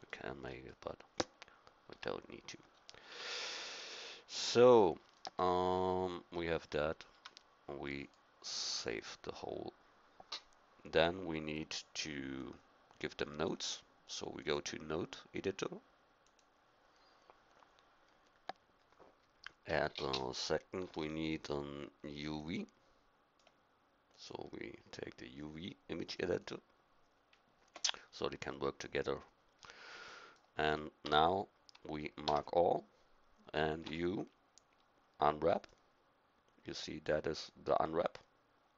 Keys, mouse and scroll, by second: 1.9 a, 3.1 Tab, 7.1 a, 12.5-13.6 drag, 17.4 middle click, 20.8 n, 22.5-26.7 drag, 29.6-30.6 middle drag, 30.6 right click, 31.0 Tab, 32.2 a, 33.8 u.